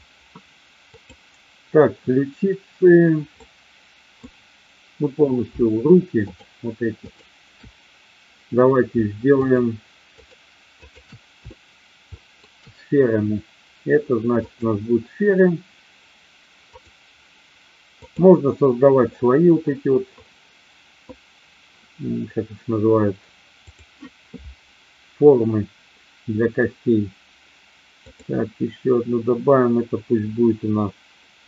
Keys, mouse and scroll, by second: 0.9-1.7 drag, 3.4-4.2 middle drag, 7.0 shift+click, 9.4-10.1 shift+drag, 10.2-11.0 shift+drag, 11.6-12.4 shift+middle drag, 14.5-16.9 drag, 18.0 click, 23.7 click, 28.0-31.4 drag.